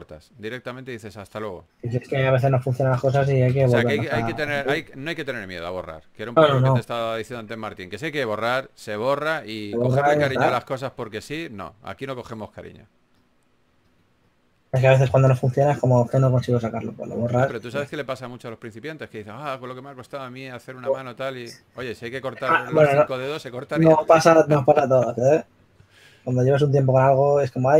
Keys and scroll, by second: 0.3 s, 2.6 typing, 5.0-6.4 typing, 7.6 s, 9.5-10.9 typing, 12.8 s, 14.2-15.9 typing, 22.8 4, 24.0 4.